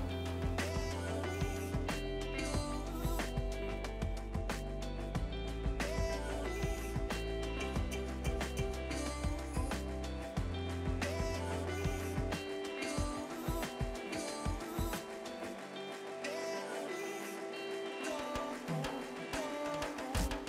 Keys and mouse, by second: 1.1 ctrl+shift+x, 1.3 click, 1.9 KP_1, 2.5 Return, 2.7 click, 4.7 Delete, 4.8 click, 7.6 right click, 8.0 click, 8.5 right click, 8.8 click, 16.7 click, 19.2 Delete, 19.4 click, 19.7 Delete, 19.9 click, 20.4 z.